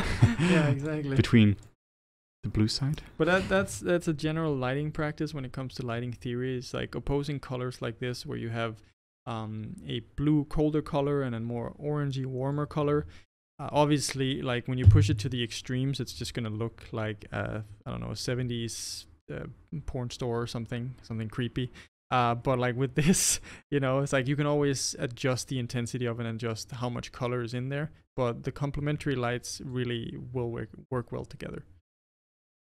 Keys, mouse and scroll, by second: 1.7 click, 6.0 click, 15.3-27.6 middle drag, 29.8 click.